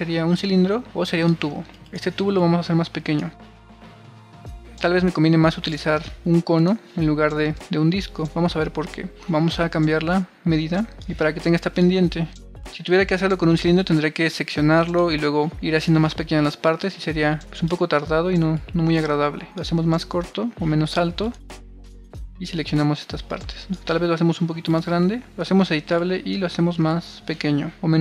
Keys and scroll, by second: 5.1 BackSpace, 7.0 BackSpace, 18.6 super+z, 25.3 c.